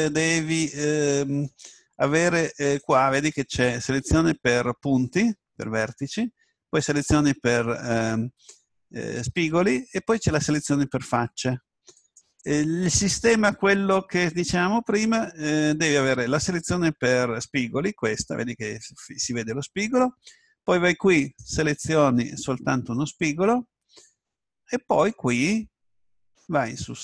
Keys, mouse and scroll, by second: 0.6-2.5 middle drag, 2.8-4.6 drag, 6.8-10.0 drag, 10.4-15.7 drag, 21.3 right click, 25.1-27.0 middle drag.